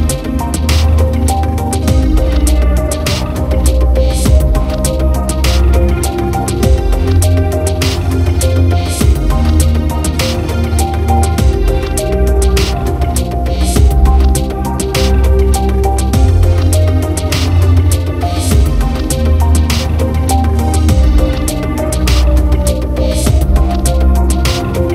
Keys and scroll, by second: 24.3-24.9 typing.